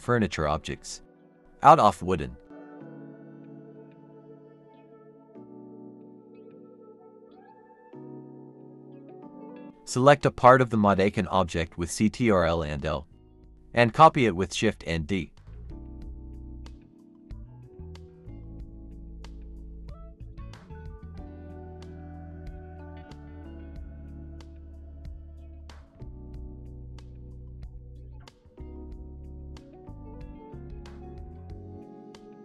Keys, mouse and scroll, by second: 0.0-7.5 typing, 3.5 Return, 3.9 Escape, 4.5 Escape, 9.2 scroll up 1, 9.7 Tab, 9.9-10.4 typing, 14.6-15.8 typing, 15.0 scroll up 1, 17.1-18.2 typing, 18.0 scroll down 1, 18.3 shift+click, 18.6-19.1 scroll down 1, 19.6-20.0 typing, 21.3 shift+click, 21.6-30.0 typing, 25.5 scroll up 1, 30.1 alt+s, 30.4 Escape, 30.6 Tab, 31.3-32.1 scroll down 1.